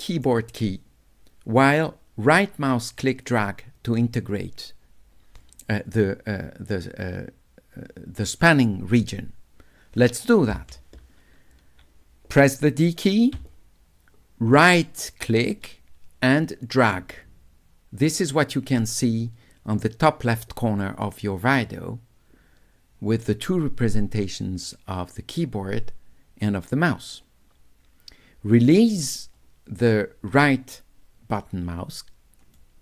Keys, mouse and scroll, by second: 13.4 d, 14.7-32.6 right drag.